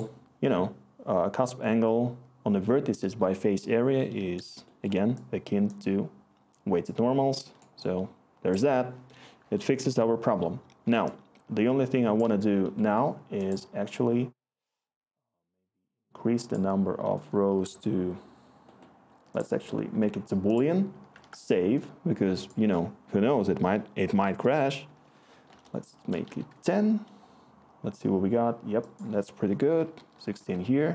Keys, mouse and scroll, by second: 6.2-8.1 click, 8.2-10.8 scroll, 11.3-13.5 scroll, 21.2 ctrl+s, 24.2 typing, 25.5-26.7 typing, 29.6-29.9 typing, 30.4-30.9 Return.